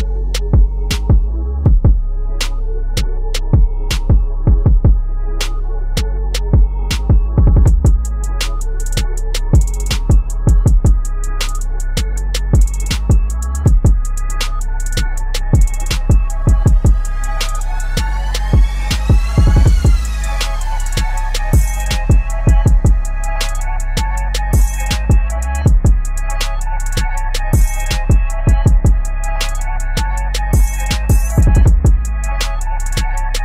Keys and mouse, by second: 8.4 Tab, 12.4-18.2 drag, 27.2-33.4 drag.